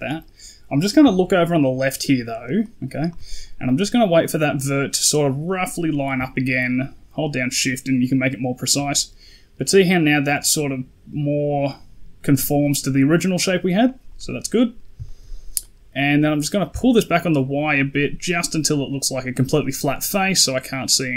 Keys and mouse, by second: 0.9 d, 1.2-2.3 drag, 2.3 d, 2.4 d, 2.5 right click, 4.1 click, 14.5 middle click, 14.9 shift+middle click, 15.5 middle click, 16.5-21.1 shift+drag.